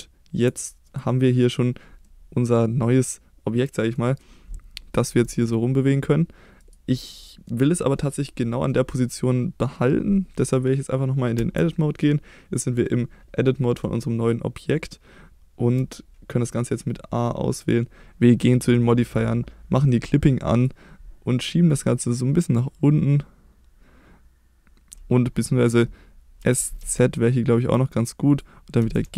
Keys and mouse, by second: 0.0 Tab, 0.9 click, 2.1-3.9 middle drag, 5.1 g, 6.6 right click, 7.1-7.5 middle drag, 8.2 middle click, 11.4 Tab, 12.0 middle click, 13.4 middle click, 15.8 a, 19.0 click, 20.5 click, 21.7-24.9 drag, 26.4 s, 26.8 z, 28.3 click, 28.8 g, 29.0 z.